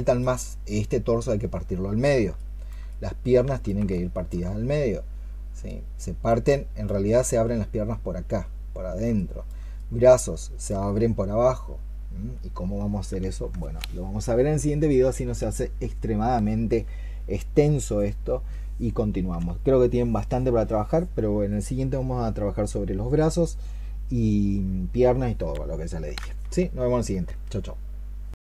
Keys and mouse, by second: 0.2 alt+click, 2.1 alt+click, 2.2 alt+click, 10.2 alt+click.